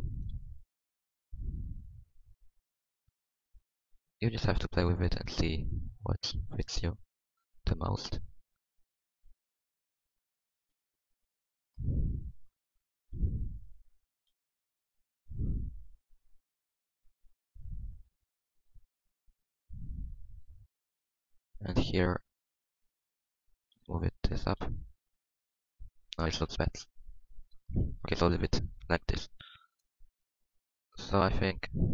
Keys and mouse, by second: 1.6 g, 3.2 click, 3.8 g, 5.5 g, 6.2 Tab, 7.8 Tab, 9.6 g, 10.6 g, 11.0 Tab, 13.0 g, 14.1 Tab, 15.5 Tab, 18.1 Tab, 18.7 Tab, 19.2 g, 20.0 Tab, 22.1 Tab, 23.7 g, 24.6 Tab, 26.3 Tab, 26.7 ctrl+z, 27.5 ctrl+z, 28.0 Tab, 29.7 ctrl+s, 30.9 Tab, 31.3 Tab.